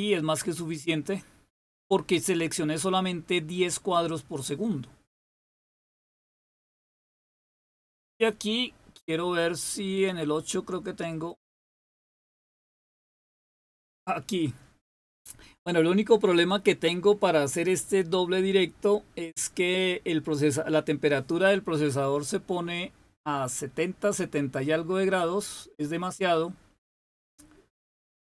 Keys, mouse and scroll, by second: 11.1 click.